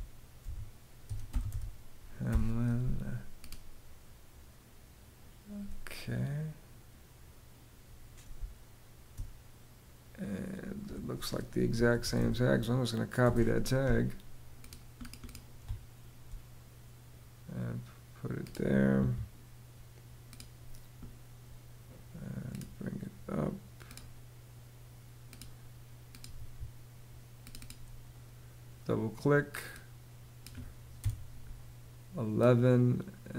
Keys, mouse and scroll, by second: 0.0-1.9 typing, 7.9 space, 11.1-12.3 typing, 12.8 Return, 15.2 space, 18.5 Escape, 25.9 Escape, 30.6 i.